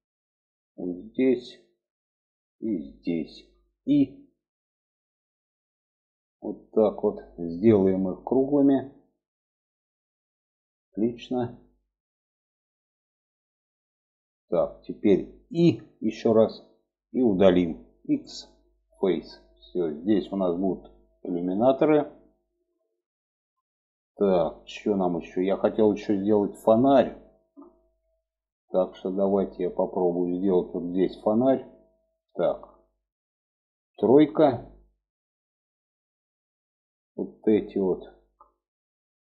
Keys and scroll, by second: 4.2 i, 17.6 x, 33.6 3.